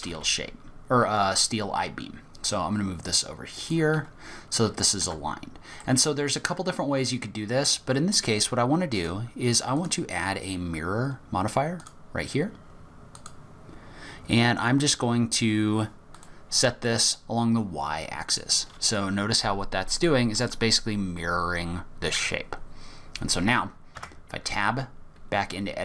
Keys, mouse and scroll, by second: 4.6-5.0 scroll up 1, 5.0 Tab, 5.8 middle click, 9.0 click, 9.8 click, 13.2 click, 16.1 click, 18.8 scroll up 1, 20.0 middle click, 24.0 Tab, 24.4-25.0 scroll down 2, 25.0-25.8 scroll down 3.